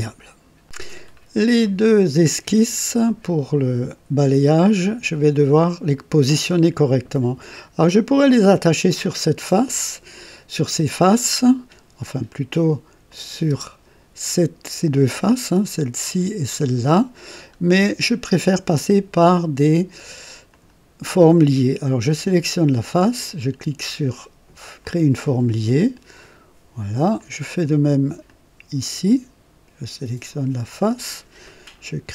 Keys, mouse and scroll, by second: 0.6 click, 1.1-1.4 scroll up 1, 1.6-2.4 right drag, 13.0 click, 13.6 space, 14.8 click, 17.3 scroll up 2, 17.7-18.4 right drag, 20.4 click, 22.0 click, 24.8 click, 26.1 click, 27.1-27.9 drag, 28.2 click, 30.7 click.